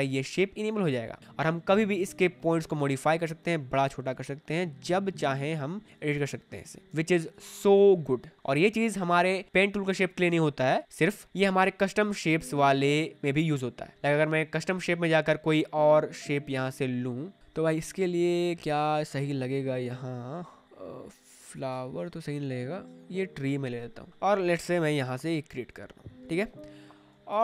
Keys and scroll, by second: 6.1 v, 6.8 space, 26.9 v.